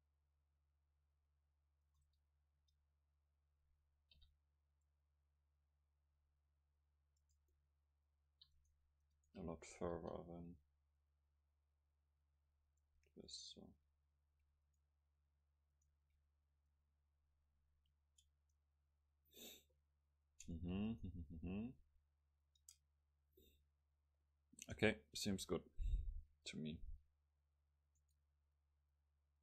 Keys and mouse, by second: 2.6 Tab, 4.2 o, 4.9-6.8 drag, 7.5-8.6 middle drag, 8.6-10.2 right drag, 10.0 KP_0, 11.0-12.8 drag, 13.3-17.6 right drag, 16.7-18.7 drag, 18.4 Tab, 20.3 Tab, 20.9-22.9 right drag, 21.7-24.1 drag, 22.6 Tab, 28.9-29.4 middle drag.